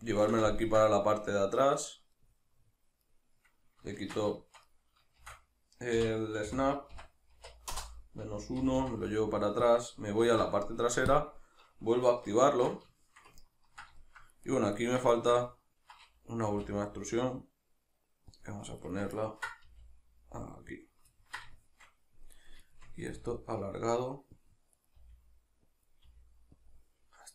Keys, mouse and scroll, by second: 4.0 shift+Tab, 5.2 shift+d, 7.8 Return, 9.8 click, 10.2 alt+q, 12.5 shift+Tab, 13.0-14.5 shift+middle drag, 14.5 right click, 14.8-15.2 ctrl+right drag, 15.2-18.5 ctrl+shift+middle drag, 16.5 e, 18.5 click, 18.8 right click, 19.2-21.1 ctrl+middle drag, 19.7 g, 20.9 click, 21.2-22.3 ctrl+middle drag, 22.3 right click, 22.7 shift+right click, 23.1 g, 24.5 click, 24.8 right click, 25.0 g, 25.9 click, 26.1 g, 26.7 click.